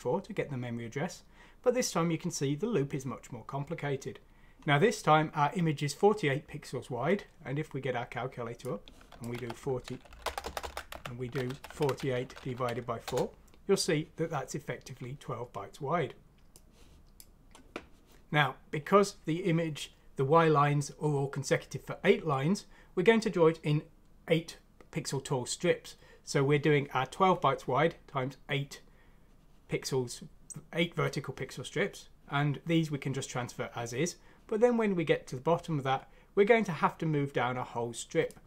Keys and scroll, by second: 9.3 4, 10.4-13.1 typing, 10.9 Escape.